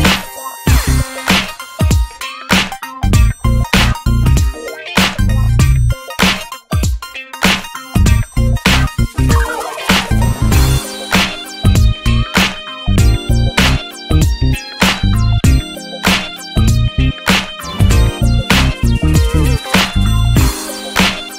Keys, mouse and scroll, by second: 0.2 click, 0.6 shift+middle click, 1.1 ctrl+s, 1.4 click, 1.7 shift+middle click, 2.0 ctrl+s, 2.2 click, 3.3 scroll down 1, 3.4 alt+z, 3.7 drag, 3.9 scroll down 5, 4.1 ctrl+s, 4.6 scroll up 1, 4.8 ctrl+s, 5.1 Tab, 5.3 scroll up 2, 6.1 alt+z, 6.3 scroll up 4, 6.6 click, 6.9 alt+z, 7.2 alt+z, 7.5 click, 8.5 ctrl+s, 9.4 click, 9.8 ctrl+s, 10.0 click, 11.1 alt+z, 11.2 scroll down 2, 11.5 Tab, 11.7 scroll up 1, 12.0 ctrl+s, 12.3 Tab, 12.5 alt+z, 12.6-13.0 scroll up 5, 13.1 shift+click, 13.5 click, 14.5 scroll down 2, 14.7-15.1 shift+middle drag, 15.1 e, 16.9 click, 18.0-19.1 scroll up 4, 18.3 ctrl+s, 18.6 shift+middle click, 19.1-20.1 drag, 20.1 alt+z, 20.2-20.5 scroll down 8, 20.5 shift+middle click, 20.7 scroll up 1, 20.8 Tab, 21.1 middle click.